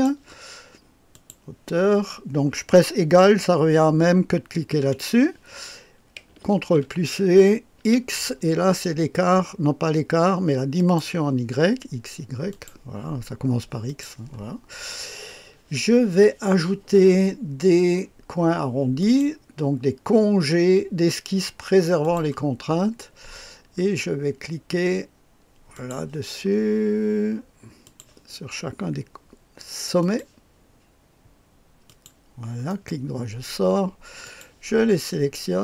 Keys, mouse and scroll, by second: 0.3 click, 1.1 click, 4.8 ≡, 5.0 =, 6.5 ctrl+v, 7.8 x, 8.4-10.7 scroll down 1, 10.7 click, 12.5 click, 13.8 click, 14.7-17.0 scroll down 1, 19.0 click, 22.0 click, 22.7-23.6 scroll up 1, 23.6-25.7 scroll down 1, 25.7 click, 27.8 click, 30.0 click, 31.8 click, 32.7 right click, 34.2 click.